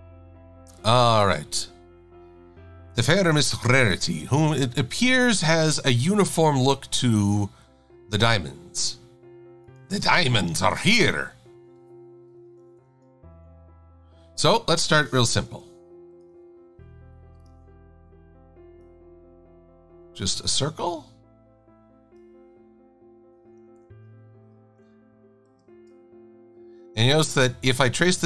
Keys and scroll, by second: 15.5 i, 23.8 super+=, 25.7 shift+super+a.